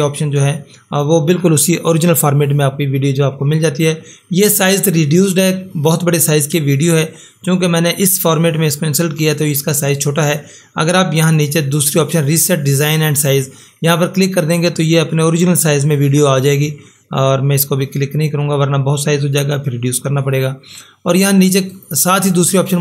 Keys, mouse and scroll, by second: 11.2 click, 21.7 click.